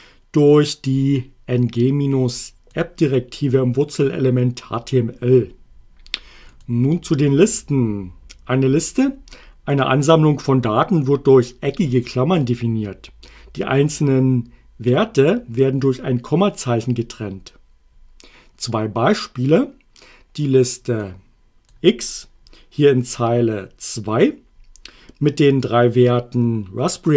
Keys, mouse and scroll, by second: 1.8-2.9 drag, 6.5 click, 21.0 click.